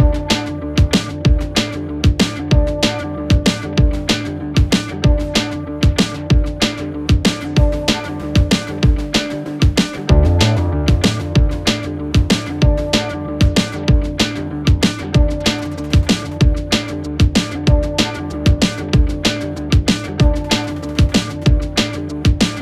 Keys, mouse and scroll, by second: 1.4 Return, 2.8-3.8 click, 5.5-6.6 click, 9.2 Return, 9.8 click, 10.6 Return, 12.3-14.9 click, 16.6 s, 17.4 click, 18.2 Return, 19.3 click, 22.0 s.